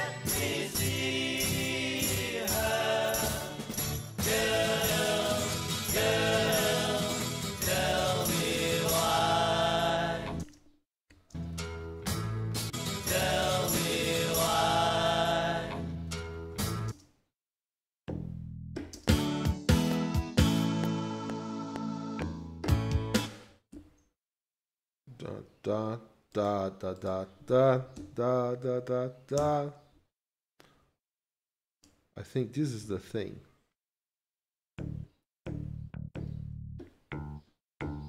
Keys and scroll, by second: 8.0 ctrl+s, 10.5 space, 11.4 ctrl+space, 12.7 ctrl+shift+Left, 16.9 space, 18.9 space, 19.7 F7, 23.1 space, 23.7 ctrl+Right, 28.0 q, 29.4 Return, 32.8 ctrl+s.